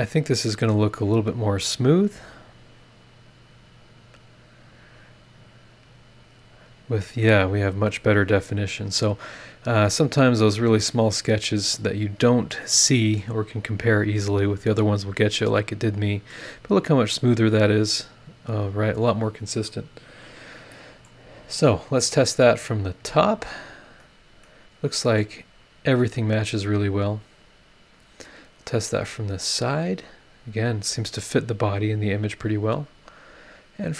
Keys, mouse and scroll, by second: 0.1 click, 1.1 click, 2.1 click, 3.0 click, 3.4 click, 4.8 click, 6.4 click, 7.2-9.1 middle drag, 7.3-9.1 drag, 7.3-9.1 right drag, 9.2-10.2 scroll up 6, 10.8-11.5 scroll down 2, 11.6-12.4 scroll up 4, 12.5 click, 13.3 scroll down 2, 14.5 click, 16.3 middle click, 16.4 click, 16.4 right click, 17.4-19.9 right drag, 21.0 middle click, 21.1 right click, 22.6 click, 23.1 scroll down 1, 23.7 scroll down 1, 24.0 middle click, 24.2-24.6 scroll up 1, 25.2 click, 25.3-28.4 middle drag, 29.2 click, 29.9 scroll down 1, 30.6 scroll up 1.